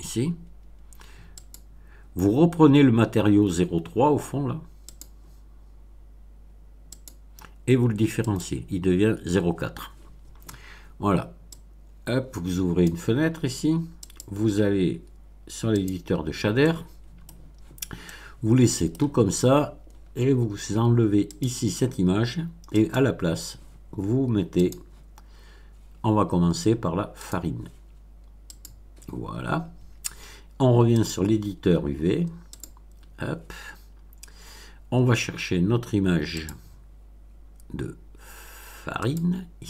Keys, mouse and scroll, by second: 1.3 click, 4.9 click, 6.9 click, 8.2 click, 11.5-13.0 drag, 14.0 click, 15.7 click, 16.5 middle click, 18.0-19.0 middle drag, 19.2-20.2 scroll up 2, 21.2 click, 22.7 click, 24.5 click, 27.1 click, 28.5 click, 30.9 click, 32.5 click, 35.0 scroll down 1, 36.3 click, 39.0 click.